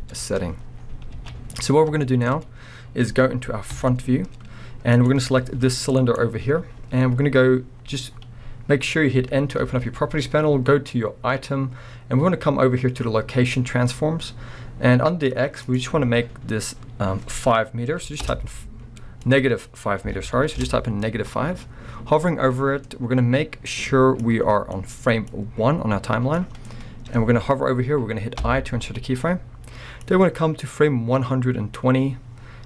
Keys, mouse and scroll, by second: 0.0-5.0 middle drag, 0.8-1.1 scroll down 2, 1.1 alt+a, 1.5-2.0 scroll up 2, 3.7 KP_1, 5.0 click, 5.3 scroll up 1, 5.5 g, 6.2 right click, 9.2 n, 15.6-25.0 drag, 18.3 Return, 20.6 Return, 28.4 i, 30.2-32.6 drag.